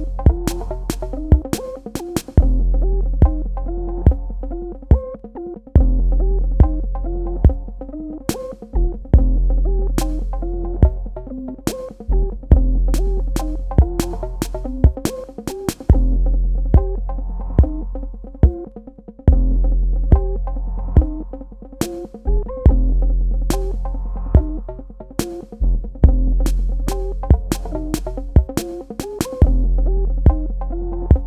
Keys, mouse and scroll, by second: 1.8 click, 6.3 Escape, 8.2 click, 14.6 space, 14.9 ctrl+alt+click, 16.0 alt+click, 17.8 space, 18.0 ctrl+alt+click, 22.8 click, 27.4 click, 30.0 click.